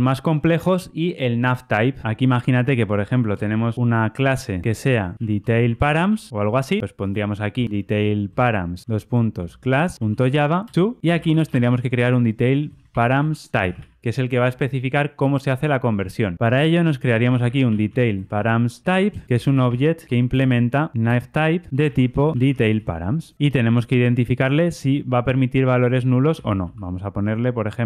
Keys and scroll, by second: 8.7 Return, 21.0 Return.